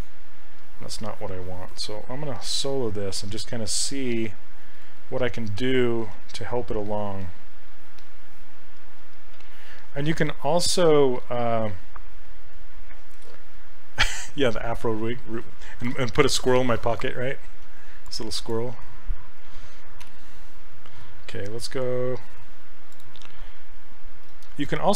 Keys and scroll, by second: 4.4 h, 6.2 s.